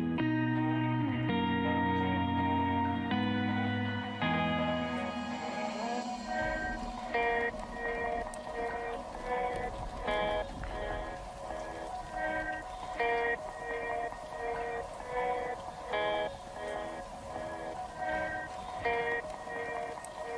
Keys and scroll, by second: 5.7 ctrl+z.